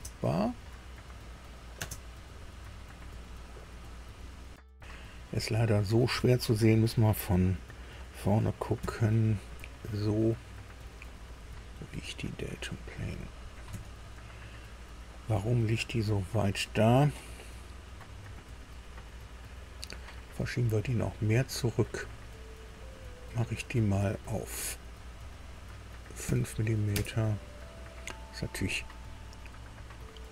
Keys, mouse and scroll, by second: 1.7 space, 2.3-5.8 middle drag, 8.7 KP_3, 11.0-13.1 middle drag, 13.6 KP_3, 18.8 scroll down 2, 19.6 click, 21.8 click, 24.1 click, 26.2 KP_5, 26.8 KP_Enter.